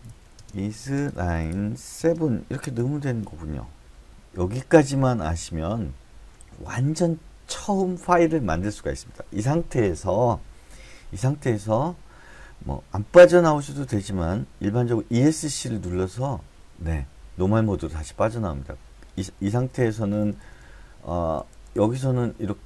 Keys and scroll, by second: 0.0-0.7 typing, 15.9 Escape, 19.5 Left, 19.8 Left, 20.0 Left, 20.2 Left, 20.4 Left, 20.6-21.4 Left, 21.9 Up.